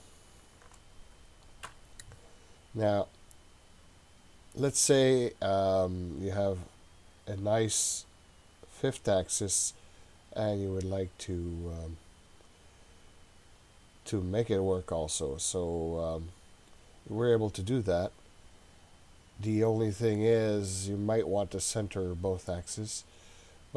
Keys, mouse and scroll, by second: 0.4 shift+click, 1.7 Delete, 2.7-4.5 scroll down 11, 5.1-5.7 scroll down 2, 11.5-13.2 scroll up 8, 13.2-16.4 scroll down 7.